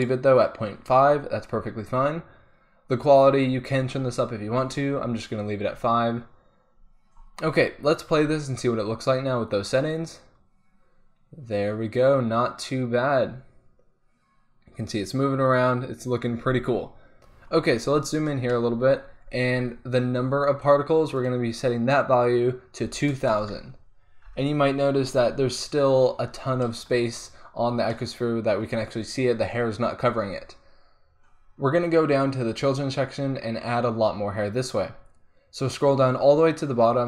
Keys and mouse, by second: 8.2 alt+a, 9.1-11.0 middle drag, 11.2-12.9 middle drag, 15.1-16.6 middle drag, 16.6 alt+a, 21.2-23.3 drag, 23.3 KP_0, 32.9-37.0 middle drag.